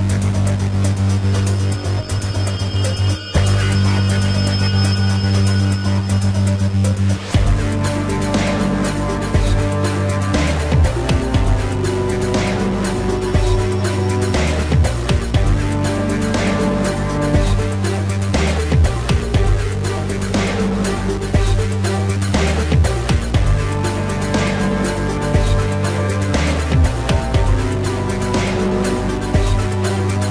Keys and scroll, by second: 0.4 space, 0.8 ctrl+-, 1.0 space, 1.1 ], 3.0 ctrl+alt+z, 4.0 ctrl+-, 4.6 ctrl+-, 5.3 space, 6.1 ctrl+-, 6.2 space, 10.2 space, 10.8 ], 17.0 ctrl+=, 18.1 space, 18.7 space, 21.0 ctrl+-.